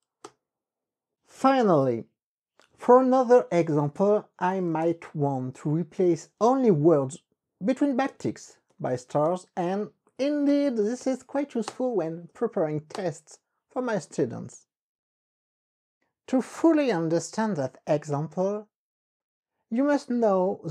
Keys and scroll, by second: 0.4 Return, 4.5-5.3 typing, 5.5 Up, 6.2 Left, 8.4 alt+Right, 8.9 KP_Multiply, 9.6 alt+Right, 10.6 KP_Multiply, 11.8 Return, 12.4 Up, 13.0 Return.